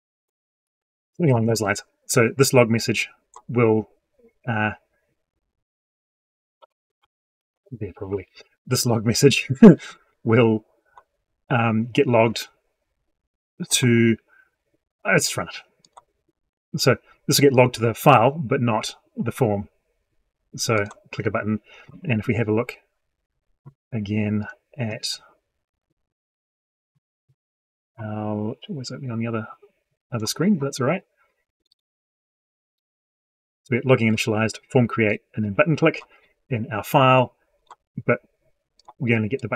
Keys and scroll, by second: 7.1 ctrl+x, 7.4 ctrl+v.